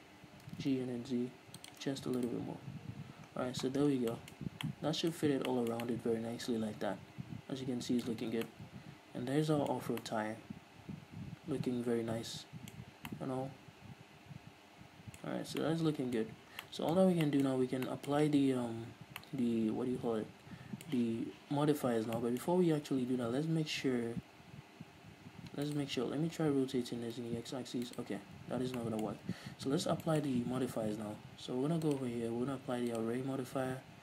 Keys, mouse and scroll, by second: 0.5 g, 2.0 shift+click, 2.5-3.6 right drag, 3.6-4.0 scroll down 2, 4.4-26.0 shift+middle drag, 4.6-4.9 scroll up 1, 5.6 scroll down 1, 8.4 a, 8.6 scroll down 2, 10.0 scroll up 2, 13.0-13.4 scroll up 2, 15.6 scroll up 2, 15.6 scroll down 2, 16.8 scroll down 1, 17.8 scroll up 1, 22.9 scroll up 1, 24.2 scroll down 1, 24.7-26.0 scroll up 2, 26.0-27.2 right drag, 27.2 r, 28.3 right click, 28.5-29.1 scroll up 2, 29.1-32.2 middle drag, 29.6-30.0 scroll down 2, 30.0-30.3 scroll up 2, 32.2-34.0 drag.